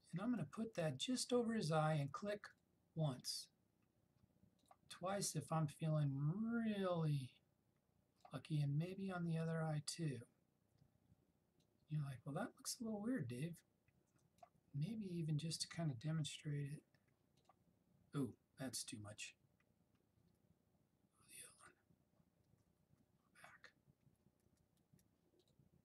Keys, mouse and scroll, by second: 0.3 [, 0.7 [, 2.6-8.1 drag, 21.9 click, 22.5-24.1 typing, 25.5 click.